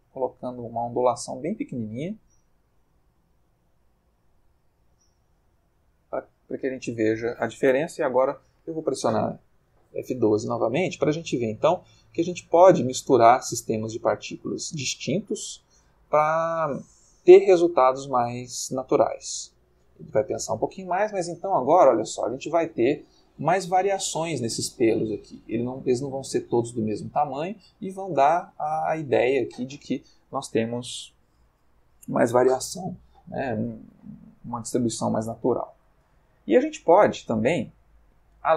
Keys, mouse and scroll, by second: 2.4-4.2 shift+middle drag, 6.3 middle click, 7.9 F12, 21.9-23.0 ctrl+middle drag, 24.7 shift+middle click, 26.9 middle click, 27.7 ctrl+middle click, 28.6 middle click, 37.9 click.